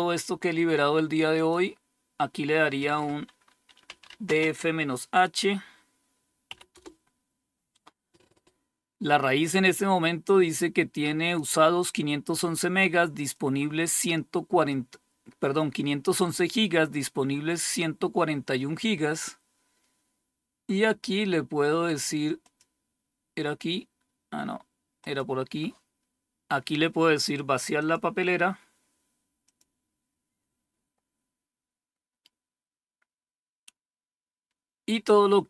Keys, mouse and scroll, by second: 0.9 click, 3.1-4.4 typing, 5.9 typing, 8.8-10.8 drag, 8.8 typing, 11.1 click, 11.1 typing, 12.8-14.6 drag, 21.9 click, 22.4 click, 24.5 click, 27.2 click, 28.9 click, 34.4 click, 35.2 click.